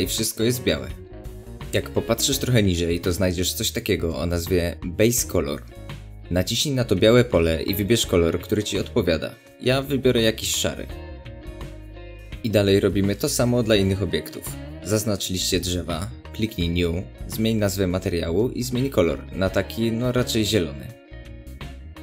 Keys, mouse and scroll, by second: 10.5-13.6 middle drag, 13.6 click, 15.4 click, 16.4 click, 16.5-21.8 drag, 19.4 Return.